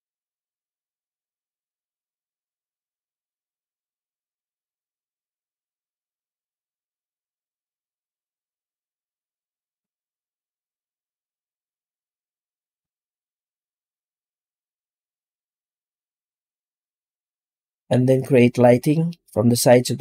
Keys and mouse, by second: 3.4 middle click, 6.0 click, 7.8-9.9 drag, 12.8-13.2 middle drag, 16.4 z.